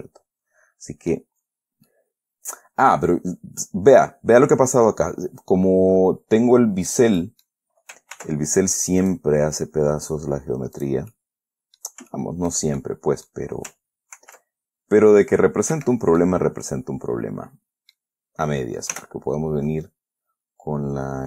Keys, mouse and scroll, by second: 0.0-1.7 middle drag, 2.0 scroll up 1, 2.2-7.5 middle drag, 7.5 middle click, 8.5 ctrl+r, 9.4 click, 11.1 click, 11.5 middle click, 12.5 shift+middle click, 13.1 shift+middle click, 14.5 ctrl+r, 16.1 Escape, 16.5-18.5 middle drag, 18.6 scroll up 2, 19.3 k.